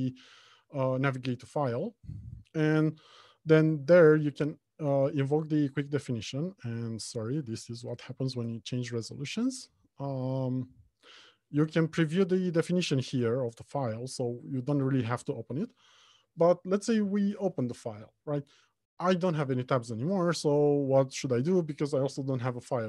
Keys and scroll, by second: 0.0 ctrl+shift+n, 6.5 ctrl+shift+i.